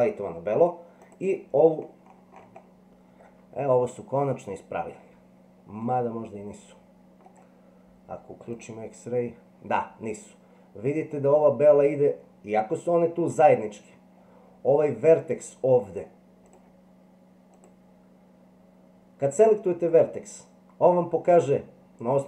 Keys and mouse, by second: 5.8-7.2 middle drag, 16.5 click, 17.5 click.